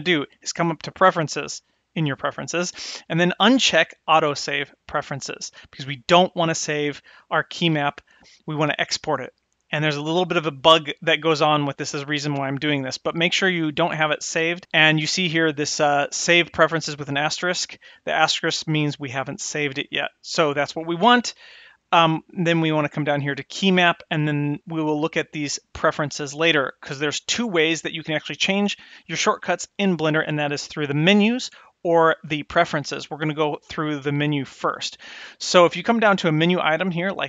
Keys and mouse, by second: 1.5-4.3 drag, 23.2 click.